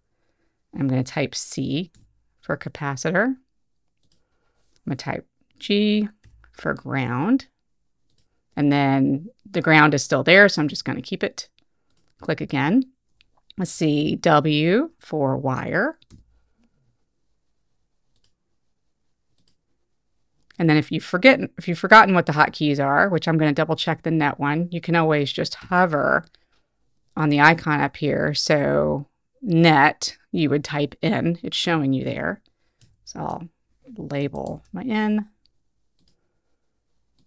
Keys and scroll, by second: 2.0 c, 6.3 g, 16.2 w, 32.9 n.